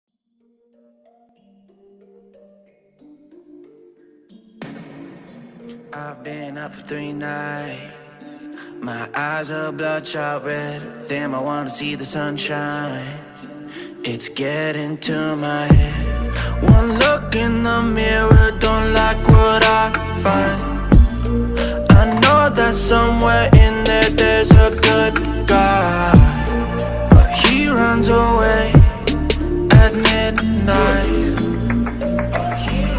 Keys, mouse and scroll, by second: 2.2-4.9 alt+shift+drag, 7.8 click, 11.7-17.9 ctrl+alt+drag, 20.8 click, 25.4 click, 29.6 click.